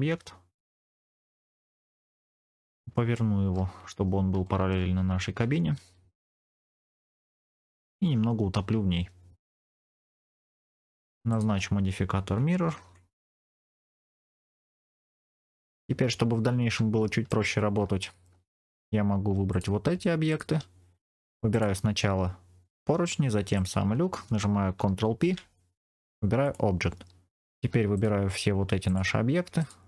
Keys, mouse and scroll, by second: 1.0 click, 1.5 KP_1, 2.3 ctrl+KP_3, 2.6-3.3 scroll up 3, 3.0 shift+middle click, 4.0 scroll up 1, 4.3 shift+middle click, 5.6 r, 7.3 click, 8.5 g, 9.3 click, 9.6 r, 10.2 middle click, 11.2 shift+click, 12.7 ctrl+l, 13.8-15.4 middle drag, 15.5 scroll down 3, 15.6 click, 16.9 shift+middle click, 17.5 scroll up 2, 17.9 shift+middle click, 18.4 middle click, 19.4 click, 20.2 shift+click, 21.4 click, 23.4 shift+click, 25.1 ctrl+p, 27.8 shift+click, 28.8 shift+click, 29.5 shift+click.